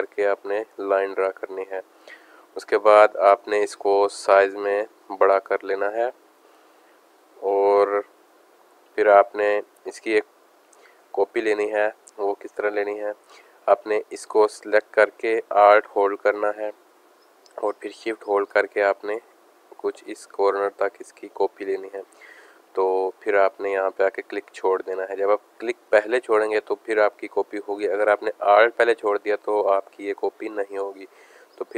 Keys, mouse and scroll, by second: 1.8 click, 3.7 click, 7.7 click, 8.3 click, 10.6 space, 10.7 click, 11.3 space, 12.9 space, 13.0 click, 15.2-16.7 drag, 25.1 space, 25.2 click, 25.5 space, 26.5 click, 29.4 space, 29.5 click, 29.8 space, 31.0 click.